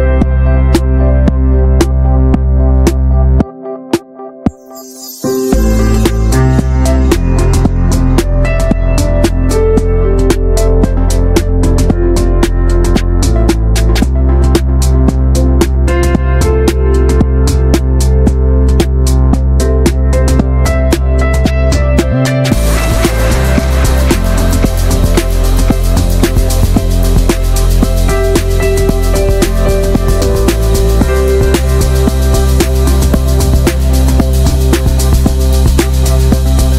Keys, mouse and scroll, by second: 0.5 alt+shift+click, 0.7 scroll down 1, 0.8 shift+middle click, 1.6-2.3 scroll up 1, 2.3 alt+shift+click, 2.5 middle click, 2.8 alt+shift+click, 3.0 scroll down 1, 3.1 middle click, 3.8 alt+shift+click, 4.1 alt+shift+click, 4.3 scroll down 1, 4.4-5.6 middle drag, 5.6 scroll up 2, 5.8-6.8 shift+middle drag, 6.8 alt+shift+click, 7.2 middle drag, 7.5 ctrl+z, 7.7 shift+middle click, 7.8 scroll up 2, 8.1 middle click, 8.7 alt+shift+click, 8.8-9.1 scroll down 1, 9.1 scroll up 1, 9.3 shift+middle click, 9.7 ctrl+z, 10.1 right click, 10.4 a, 10.9 a, 11.1 right click, 11.6 scroll down 1, 11.7-12.3 middle drag, 12.3 Tab, 12.4 scroll down 1, 12.5-13.3 shift+middle drag, 13.3 click, 13.4 Tab, 13.7 shift+middle click, 13.9 scroll down 2, 14.1 middle click, 14.3 alt+z, 14.5 middle click, 14.9-15.2 scroll up 1, 15.2 middle click, 15.5 alt+z, 15.7-16.1 shift+middle drag, 16.1 Tab, 16.5 shift+middle click, 16.7 Tab, 16.8-18.1 scroll up 9, 17.0 shift+middle drag, 17.3 middle click, 17.5 shift+middle click, 18.1-18.5 drag, 18.7-19.0 scroll down 6, 19.0 middle click, 19.7 alt+shift+click, 20.0 scroll down 3, 20.2 shift+middle click, 21.0 right click, 21.2 a, 21.5 a, 21.6-22.7 right drag, 22.7 middle drag, 22.9 Tab, 22.9 drag, 23.1-23.6 shift+middle drag, 23.6 ctrl+s, 24.0 /, 24.3 middle click, 24.5 ctrl+s, 24.7 shift+middle click, 25.3-26.9 drag, 27.6 drag, 27.8-28.1 shift+middle drag, 28.1 ctrl+s, 28.3 scroll up 2, 28.4-28.8 shift+middle drag, 28.8 ctrl+s, 29.1 click, 29.3 Tab, 29.4-30.1 scroll down 4, 30.1 s, 32.0 ctrl+z, 32.3 Tab, 32.5 shift+middle click, 32.6-33.1 scroll up 4, 32.8 shift+middle click, 33.5 click, 33.7 shift+middle click, 33.8-35.1 scroll up 5, 33.9 middle drag, 34.3 Tab, 34.6 shift+middle click, 34.8 middle click, 35.1 shift+middle click, 35.4 click, 36.0 alt+shift+click, 36.0-36.5 scroll down 2, 36.7 shift+middle click.